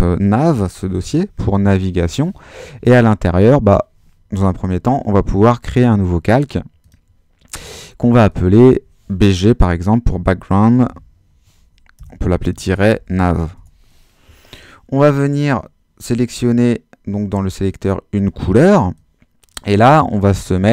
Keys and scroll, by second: 0.0-1.9 typing, 9.5-13.9 typing, 11.9 Delete.